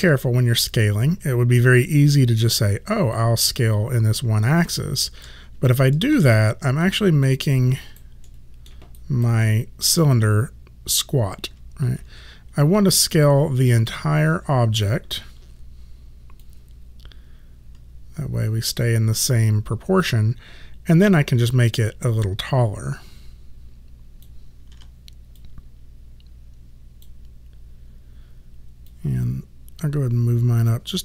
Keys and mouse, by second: 3.2 click, 5.6 space, 6.9 alt+click, 7.5 alt+right click, 8.3 alt+middle click, 9.0 alt+right click, 9.5 alt+middle click, 12.0 ctrl+z, 13.2 space, 16.5 click, 21.7 click, 24.8 w, 25.4 click, 28.9 click.